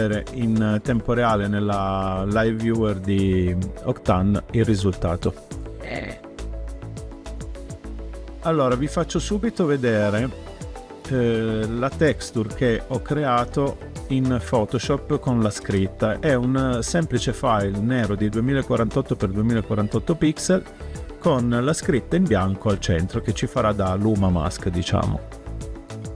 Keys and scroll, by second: 15.5 space.